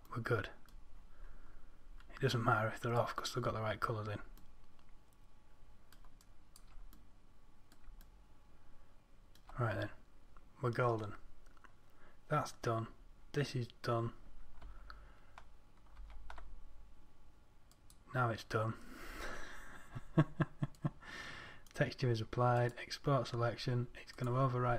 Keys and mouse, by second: 6.7-7.4 drag, 7.4-8.0 middle drag, 16.5 ctrl+a.